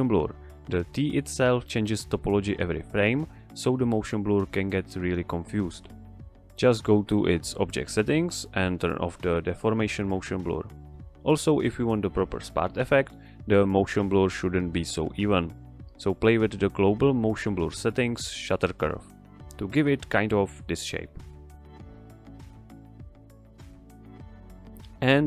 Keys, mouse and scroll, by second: 12.8 click, 17.9 scroll down 1, 18.5 scroll down 1.